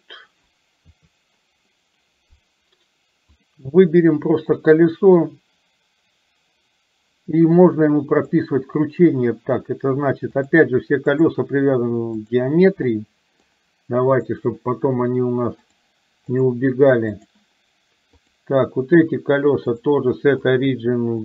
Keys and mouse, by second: 0.9 KP_3, 3.4 click, 10.4-12.5 drag, 13.0 middle click, 14.2 click, 15.6-17.5 drag, 19.9-21.2 drag.